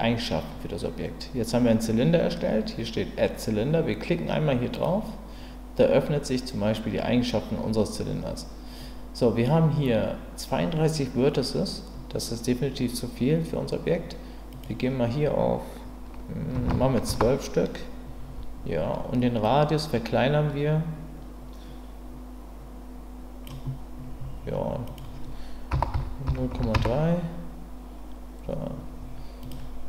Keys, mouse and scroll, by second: 14.5-18.7 drag, 19.4-23.4 drag, 24.8-28.5 drag, 29.4-29.8 drag.